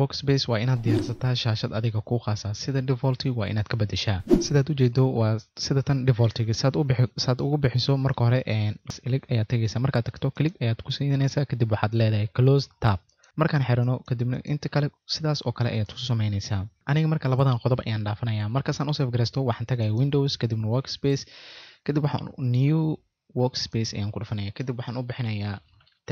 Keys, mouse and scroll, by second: 10.3 click, 13.8 click, 15.8 click, 19.8 click.